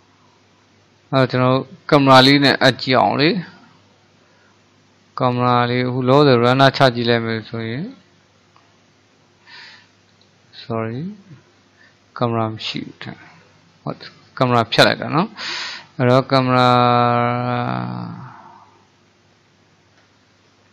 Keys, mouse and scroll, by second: 6.5-9.6 drag, 10.1 click, 12.2-15.8 middle drag, 15.8-18.9 drag.